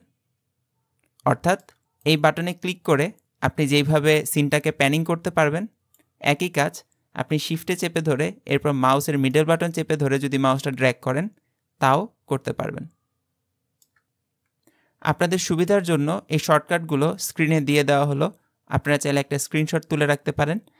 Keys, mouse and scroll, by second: 2.1-4.4 drag, 9.3-12.4 shift+middle drag.